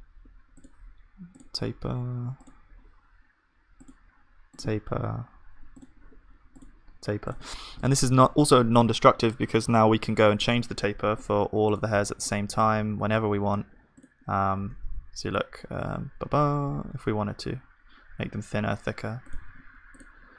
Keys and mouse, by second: 12.6 Tab, 12.6-15.9 drag, 14.4 g, 20.0 ctrl+s, 20.0-20.3 drag.